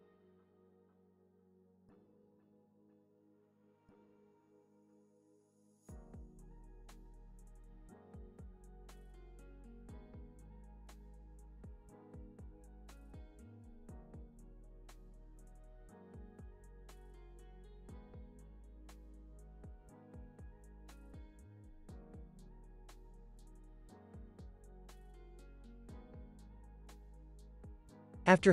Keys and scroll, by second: 3.2 space, 5.3 space, 8.3 space, 11.4 space, 12.1 super+s, 12.7 z, 16.8 space, 20.1 space, 20.4 super+s, 24.8 super+s.